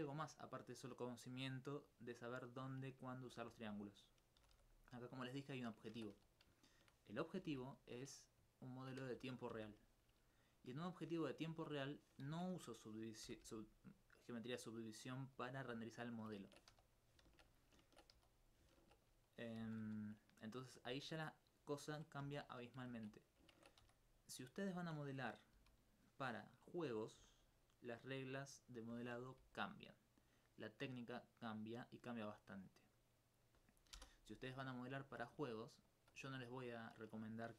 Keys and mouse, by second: 1.8 right click, 3.2 alt+click, 3.9 right click, 4.4 g, 4.5 g, 6.4 right click, 7.4 alt+m, 7.7 click, 8.2 right click, 8.5 shift+right click, 9.5 alt+m, 9.8 click, 10.5 right click, 11.0 shift+right click, 12.3 ctrl+z, 13.2 ctrl+g, 15.2 alt+click, 15.7 alt+click, 16.4 ctrl+Tab, 16.7 ctrl+2, 16.9 right click, 17.3 ctrl+x, 18.2 ctrl+1, 19.0 click, 19.4 right click, 19.8 z, 20.4 right click, 20.9 ctrl+x, 22.2 j, 22.9 ctrl+z, 23.2 right click, 23.6 ctrl+Tab, 23.8 ctrl+1, 24.0 right click, 25.6 j, 30.2 click, 34.0 click, 34.8 right click, 35.9 shift+click, 36.4 alt+click, 36.6 alt+click, 37.4 alt+click.